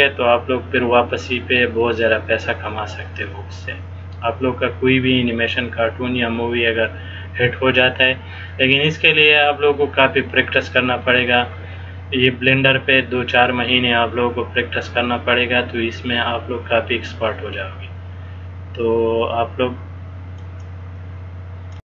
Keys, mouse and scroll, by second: 20.5 click.